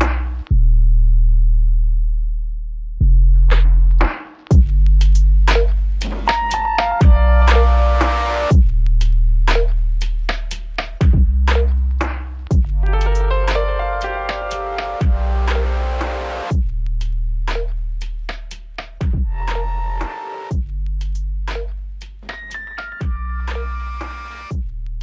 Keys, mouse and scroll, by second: 1.1 ctrl+alt+click, 3.8 alt+shift+click, 6.8 double click, 10.3 alt+click, 11.2 alt+click, 11.4 alt+click, 12.4 alt+click, 12.5 ctrl+click, 17.5 typing, 19.4 ctrl+click.